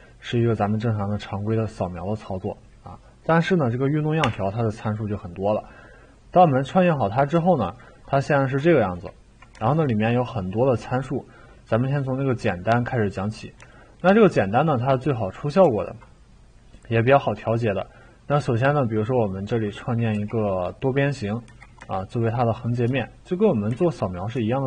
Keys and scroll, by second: 4.2 Delete, 20.1 t, 21.5 e, 22.9-24.2 typing.